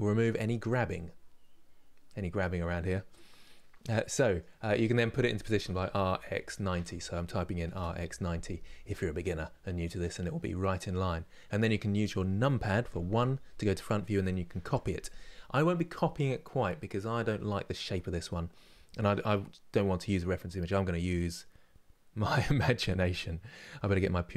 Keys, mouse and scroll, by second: 3.5-5.3 middle drag, 5.3 r, 8.5-11.6 middle drag, 12.6 KP_1.